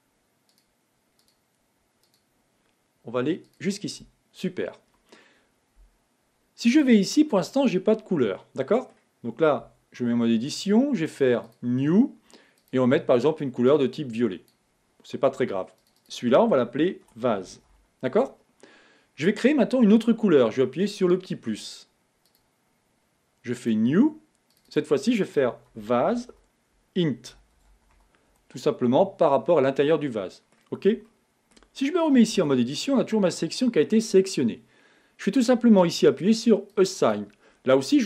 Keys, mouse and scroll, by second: 0.8 alt+shift+click, 1.5 alt+shift+click, 2.3 alt+shift+click, 3.8 alt+shift+click, 7.0 click, 8.7-9.9 middle drag, 9.9 Tab, 10.4 middle click, 10.9-11.7 scroll up 1, 11.8 click, 12.9 click, 16.3-19.3 drag, 22.7 click, 23.9-24.9 drag, 25.0-28.0 drag, 30.5-32.6 middle drag, 32.6 Tab, 37.1-38.0 drag.